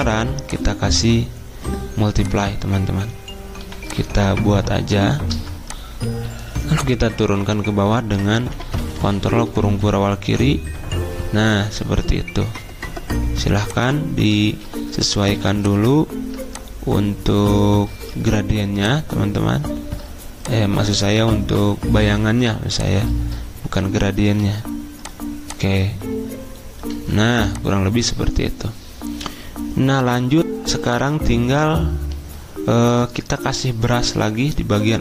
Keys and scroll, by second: 3.6 r, 5.3 v, 8.4 ctrl+[, 8.6 ctrl+[, 8.7 ctrl+[, 14.5 ctrl+z, 15.3 ctrl+2, 24.4 r, 26.9 v.